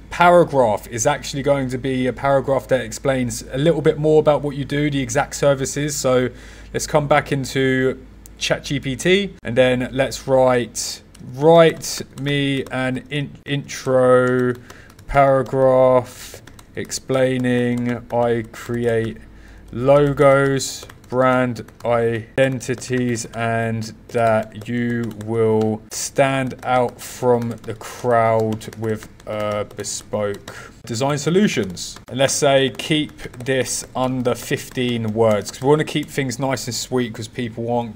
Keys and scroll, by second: 11.0 w.